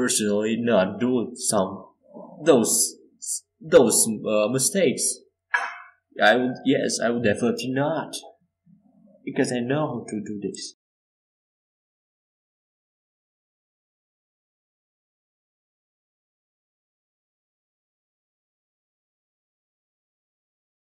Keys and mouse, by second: 0.3 Tab, 1.6-4.4 drag, 5.6 KP_5, 7.4 middle click, 15.2-19.2 right drag, 18.0-20.8 drag, 19.2 e, 20.8-20.9 right drag.